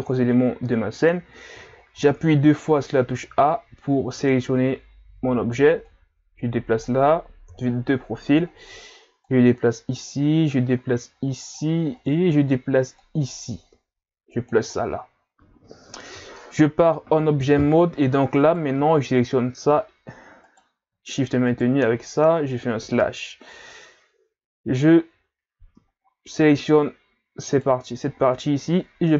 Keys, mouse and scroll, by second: 1.5 a, 2.0 a, 5.9 click, 7.5 KP_3, 8.4 scroll up 4, 9.2 click, 11.9-12.3 ctrl+scroll up 3, 13.0 click, 14.7-15.3 scroll down 1, 15.3 scroll down 7, 15.8 Tab, 18.4 shift+right click, 20.4 right click, 21.5 shift+right click, 22.8 KP_Divide, 26.0-27.3 ctrl+scroll up 4, 27.5 right click, 28.1-28.6 ctrl+scroll up 1, 29.0 Tab.